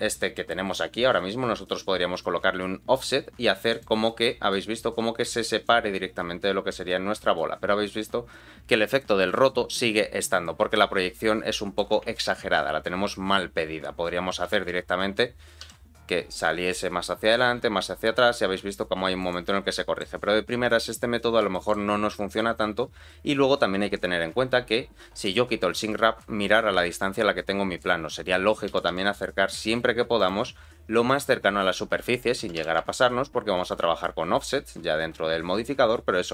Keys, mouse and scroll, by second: 2.2-3.8 shift+drag, 4.0 middle click, 5.6-8.9 shift+drag, 9.3 middle click, 10.1 scroll down 1, 10.4-11.8 middle drag, 12.2 ctrl+z, 13.9-14.4 scroll down 1, 14.4 g, 19.7 middle click, 20.2-20.9 scroll up 1, 20.9-21.4 scroll down 2, 21.5 shift+middle click, 25.2 click, 25.9 scroll down 2, 26.2-27.8 middle drag, 28.7 g, 31.0 click, 31.4 scroll up 2, 32.4-32.8 scroll up 1, 32.4 g, 36.2-36.3 scroll down 2.